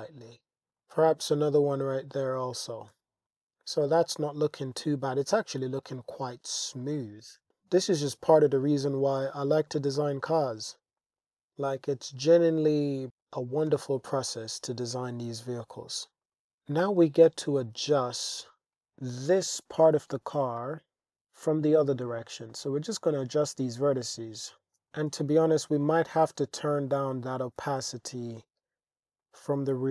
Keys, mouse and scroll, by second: 0.6 super+r, 0.7 g, 1.0 z, 2.7 click, 2.9 Tab, 5.1-6.0 middle drag, 6.4-6.8 middle drag, 7.9 click, 9.4 shift+drag, 11.0 shift+drag, 12.0 click, 13.1-13.4 shift+drag, 13.7 Tab, 14.3 shift+click, 15.1 Tab, 16.2 click, 16.5 Tab, 17.3 shift+click, 18.2-19.3 drag, 20.4 g, 20.6 y, 21.1 x, 23.9 alt+z, 24.4 alt+z, 24.8 g, 25.1 x, 25.8 click, 26.3 click, 27.6 g, 27.9 x, 29.2 click, 29.6 click.